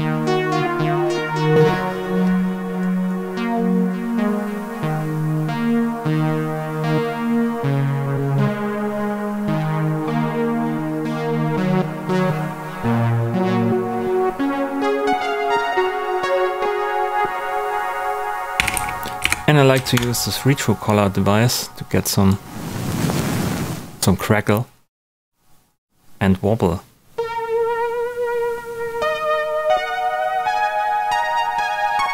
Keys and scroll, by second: 18.3-19.7 typing, 19.7 Down, 19.9 Return.